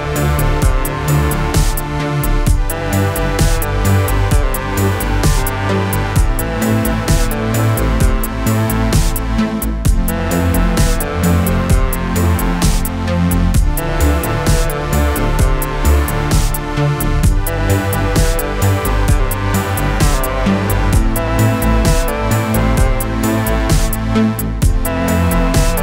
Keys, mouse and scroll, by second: 0.2 click, 1.0-2.3 typing, 3.1-4.8 click, 8.3-10.9 click, 11.8 click, 14.5 click, 16.0-16.8 click, 18.4 ctrl+d, 20.6 p, 21.6 click, 24.8 Down.